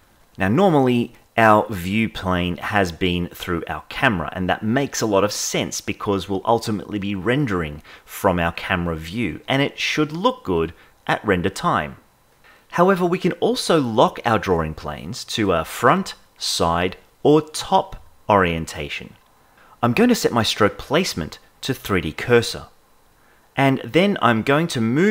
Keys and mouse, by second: 24.0-25.1 drag.